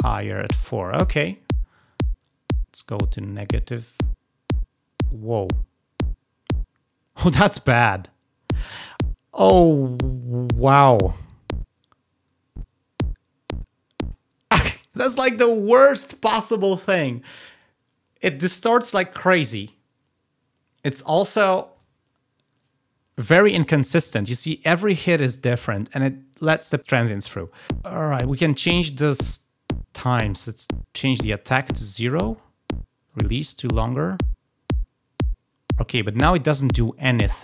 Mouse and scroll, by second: 4.6 click, 10.7 click, 30.2 click, 33.0-35.9 drag.